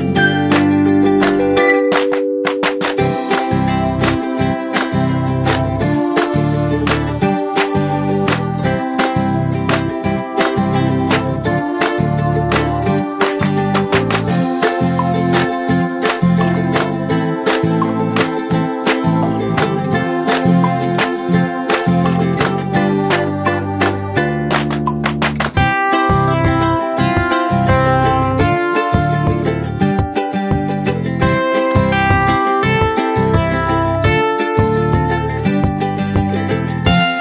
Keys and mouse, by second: 1.6-2.6 drag, 3.3 Up, 6.3 click, 7.5 m, 9.2 click, 12.2 click, 13.8-16.7 drag, 26.8 click, 35.4 click.